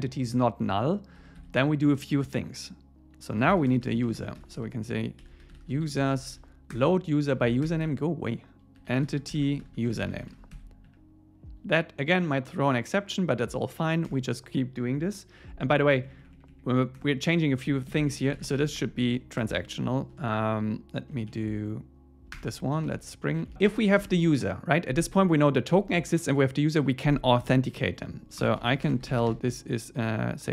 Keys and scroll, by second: 1.2 Escape, 6.8 Return, 10.8 Right, 14.1 Return, 15.9 Up, 17.0 Return, 17.9 alt+l, 21.2 Down, 22.4 Return, 22.8 super+s, 23.3 Down, 23.5 Tab.